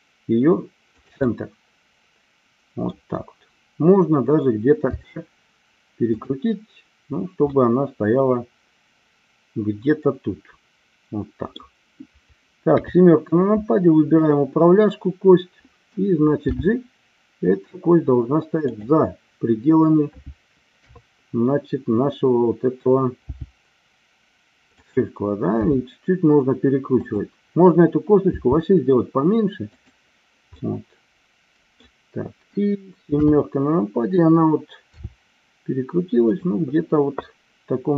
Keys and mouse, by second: 0.9 click, 1.3-2.9 middle drag, 4.9 r, 7.5-11.6 middle drag, 12.6 KP_7, 14.1-15.1 drag, 16.5 g, 18.7 click, 20.7 KP_3, 23.2 g, 24.8 click, 25.6 r, 27.0 click, 28.2 g, 30.4-31.8 middle drag, 33.2 KP_7, 34.8 r.